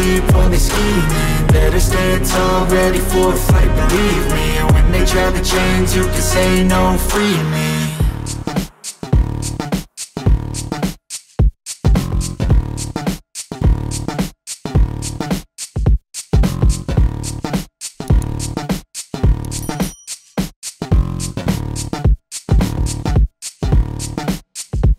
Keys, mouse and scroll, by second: 0.3 middle click, 1.1 middle click, 1.9 click, 2.3 KP_0, 4.2 click, 5.0 click, 6.8-8.2 drag, 8.7 middle click, 8.9 middle click, 9.4 space, 10.0 space, 10.4 shift+middle click, 11.6 r, 13.0-14.5 drag, 13.9 KP_0, 14.9 middle click, 15.2 s, 16.7-18.7 drag, 19.4 middle click, 20.4-24.9 typing, 24.4 middle click, 24.8 middle click, 24.8 shift+middle click.